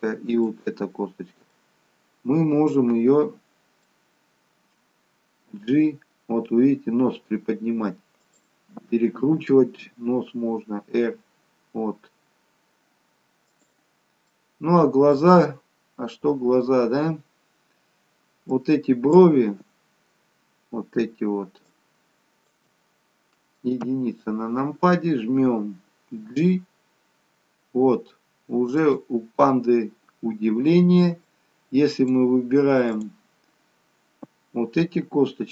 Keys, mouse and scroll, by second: 0.5 shift+click, 1.6 middle click, 4.1-5.2 scroll up 2, 5.8 g, 14.1 scroll down 2, 14.3 middle click, 15.7-16.1 scroll up 1, 16.1-16.8 scroll down 1, 16.8-17.4 scroll up 1, 17.6 scroll up 1, 18.6 click, 21.9 shift+click, 23.9 KP_1, 26.4 g, 31.4 click.